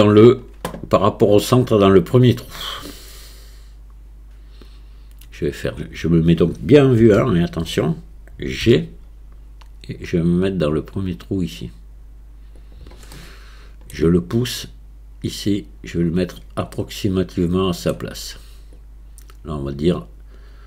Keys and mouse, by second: 7.0 KP_1, 8.7 g, 13.2 middle click, 14.6-16.1 drag, 16.8 click, 16.8 middle click, 16.8 right click, 17.5 click, 17.5 middle click, 17.5 right click, 18.8-20.6 drag.